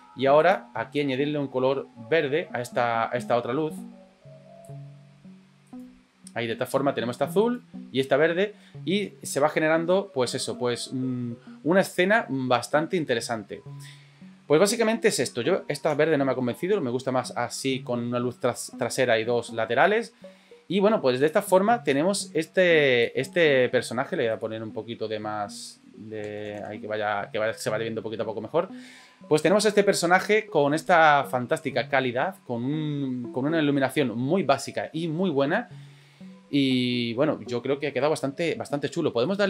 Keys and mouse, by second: 5.7 right click, 7.4 right click, 15.8 Delete, 21.9-23.1 drag, 25.8-27.3 drag.